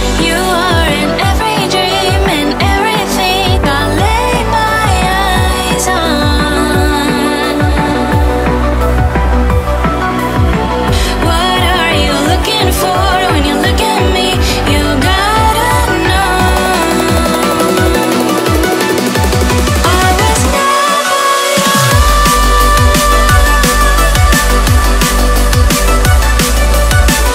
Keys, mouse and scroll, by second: 0.5 click, 1.1 click, 2.1 click, 2.7 click, 4.2 s, 8.1 click, 8.6 click, 12.8 click, 13.4 click, 14.6 click, 16.3 click, 21.9 click, 22.3 click, 23.2 click, 24.4-24.8 scroll up 1, 25.2 click.